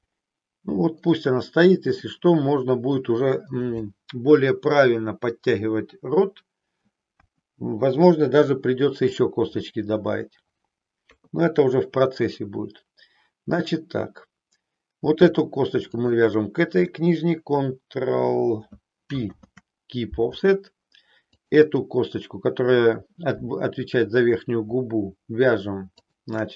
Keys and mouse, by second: 1.2-2.2 middle drag, 7.2 KP_1, 11.0 KP_3, 16.0 shift+click, 19.2 ctrl+p, 21.4 click, 25.9 shift+click.